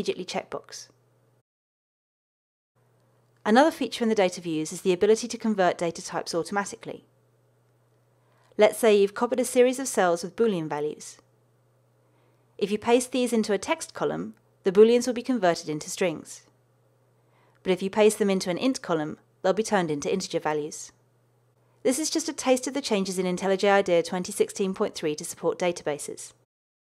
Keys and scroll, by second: 9.3 super+c, 17.3 super+v, 18.2 super+v.